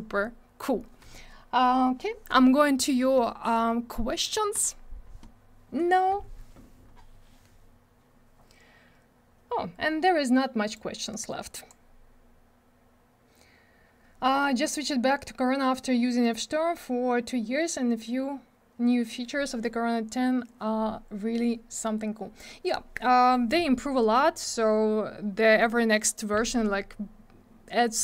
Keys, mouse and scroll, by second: 4.5 click, 4.6 click.